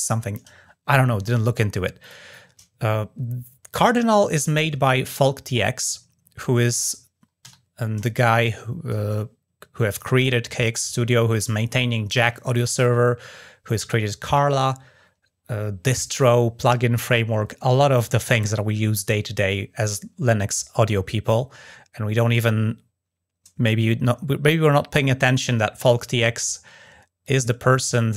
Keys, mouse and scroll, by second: 1.8 click, 5.2 click, 6.5 drag, 27.0 click.